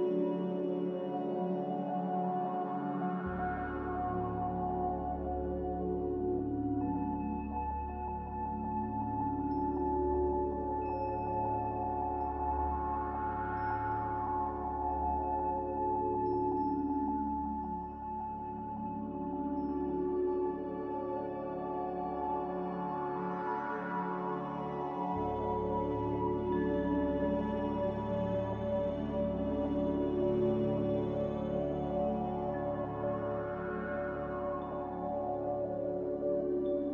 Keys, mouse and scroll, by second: 6.0 x, 8.0-8.9 typing, 10.0-11.4 typing, 12.7-13.5 typing, 15.0-16.6 typing, 17.9-20.1 typing, 19.5 Return, 23.2 n.